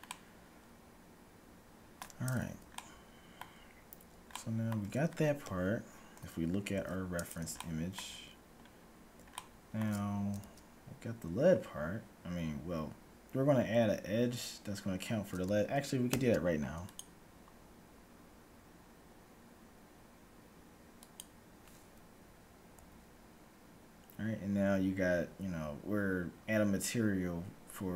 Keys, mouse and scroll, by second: 0.0-1.8 middle drag, 2.6-6.0 middle drag, 5.5 KP_1, 6.1-6.8 scroll up 1, 6.8-11.1 middle drag, 6.8 z, 10.5 z, 16.0 ctrl+r, 22.8 a.